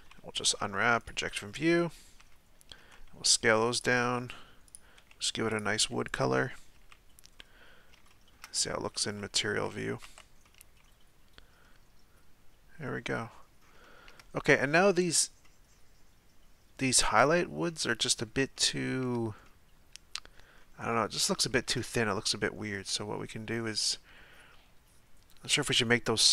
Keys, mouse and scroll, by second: 1.1 u, 2.2 a, 2.8 s, 4.0 g, 5.0 s, 5.7 g, 6.9 z, 7.4-8.9 middle drag, 8.9 z, 9.1 z, 9.4 z, 10.1 Tab, 10.5-13.4 middle drag, 13.4-13.8 scroll up 1, 13.8-26.3 shift+middle drag.